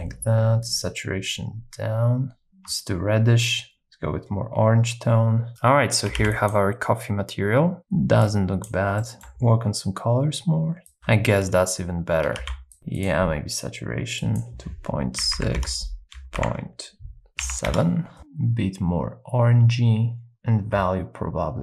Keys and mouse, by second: 6.2 ctrl+b, 9.0 middle click, 12.4 ctrl+b, 13.0 click.